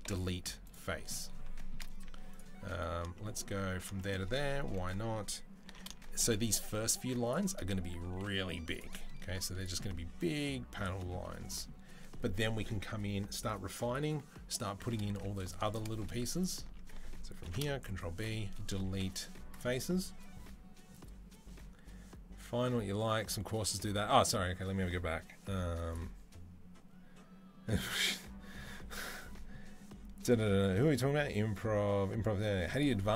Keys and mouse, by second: 2.1 alt+click, 2.4-7.9 middle drag, 4.3 KP_3, 5.5 ctrl+b, 8.6 Delete, 8.6-16.1 middle drag, 9.1 z, 14.9 z, 16.1 alt+click, 16.2 alt+middle click, 17.2 ctrl+b, 18.7 Delete.